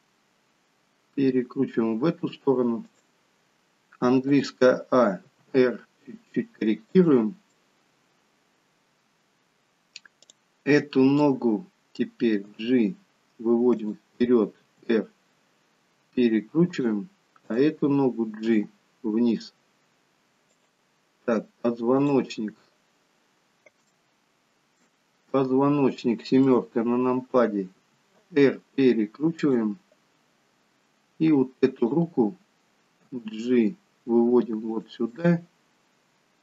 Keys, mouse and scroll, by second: 4.4 a, 5.3 r, 7.6 middle click, 10.4 click, 11.2 middle click, 12.6 g, 14.7 r, 17.6 click, 18.6 g, 22.1 click, 23.6 shift+middle click, 24.0 middle click, 26.5 KP_7, 28.0 r, 30.6 scroll up 2, 31.9 click, 33.1 g, 35.3 middle click.